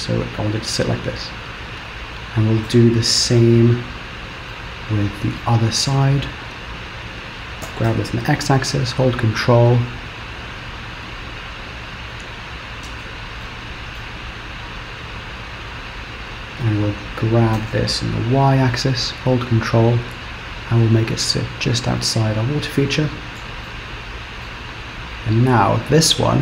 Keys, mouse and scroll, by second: 1.0-2.1 scroll down 3, 2.1 scroll up 1, 3.5-4.1 scroll down 1, 4.5 shift+middle click, 6.1 click, 7.7 g, 13.5 shift+middle click, 14.7 click, 17.6 g, 22.5 scroll down 1, 23.7 shift+middle click, 25.5 click.